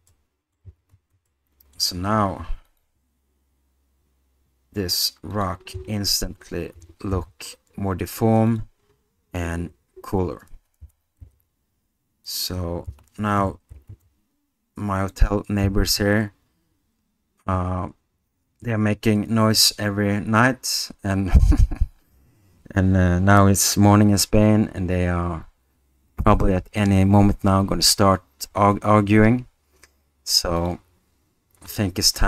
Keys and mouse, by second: 0.1-0.5 middle drag, 1.3-1.7 middle drag, 2.7 alt+click, 5.3-5.6 drag, 6.7 r, 7.1 z, 10.8 r, 11.2 z, 12.9 s, 14.2 z, 31.7 click.